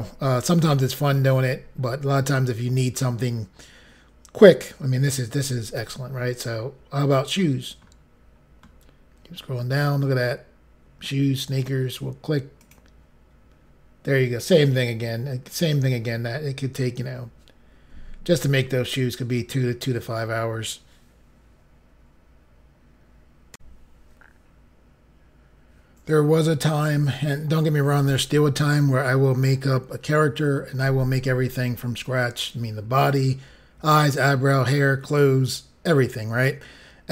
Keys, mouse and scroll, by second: 7.4-8.2 scroll down 5, 11.0 scroll down 1, 12.6 click, 23.5 Insert.